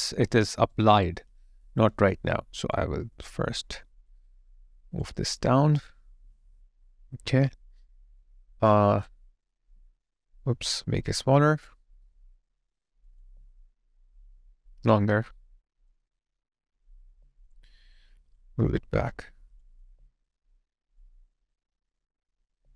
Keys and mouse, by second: 0.3 alt+middle click, 0.8 alt+right click, 2.6 ctrl+click, 13.2 alt+click, 17.0 alt+click, 17.7 alt+right click, 19.7 alt+right click, 19.9 alt+click, 22.4 alt+click.